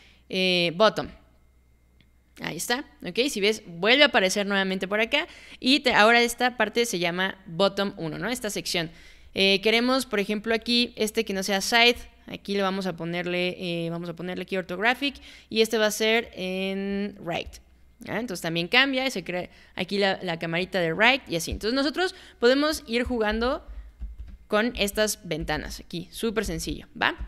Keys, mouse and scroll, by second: 1.0 click, 5.9 click, 12.0 click, 17.5 click, 21.5 click, 23.1 click, 23.3 space, 24.0 space, 24.7 space, 25.4 space, 26.4 space, 27.2 space.